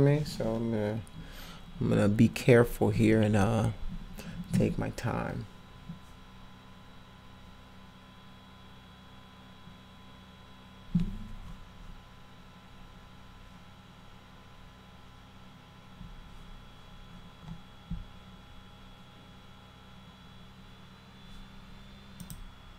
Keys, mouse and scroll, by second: 22.2 click.